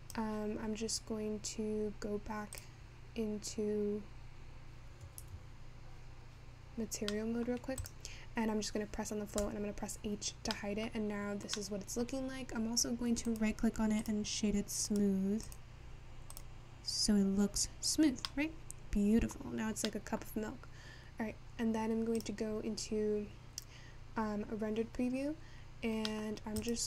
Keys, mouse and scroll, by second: 0.0-2.6 drag, 4.1 click, 6.1 ctrl+s, 7.5 middle click, 7.7-8.2 scroll up 1, 8.2 click, 12.7 middle click, 13.0-13.4 scroll up 3, 13.4-15.0 right drag, 15.0-19.1 drag, 19.1 middle click, 19.6-20.7 scroll down 10, 20.7-22.0 scroll up 3, 23.2 click.